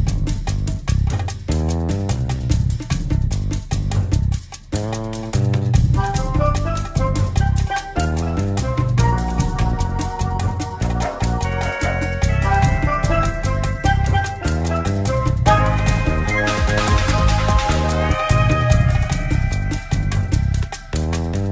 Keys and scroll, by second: 16.7 w.